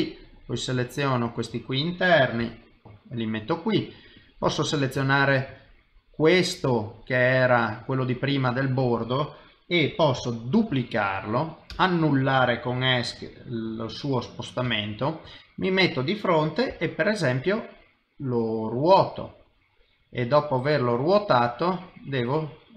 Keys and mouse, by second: 0.3 click, 1.2 shift+click, 1.7 middle click, 2.4 g, 2.8 middle click, 4.2 click, 4.5 middle click, 5.1 ctrl+middle click, 5.6 middle click, 7.1 middle click, 8.0 middle click, 10.5 shift+d, 14.6 KP_3, 15.2 KP_1, 16.7 r, 19.8 middle click.